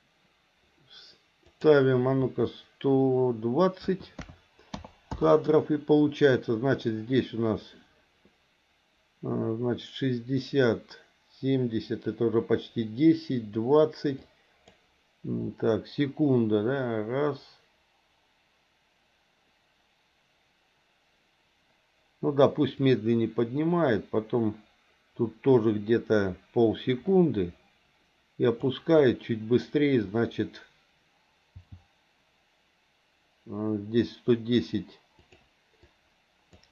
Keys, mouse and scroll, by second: 1.4-5.1 drag, 14.1 click, 22.8-28.7 drag, 29.0 click, 31.6 g, 35.9 click.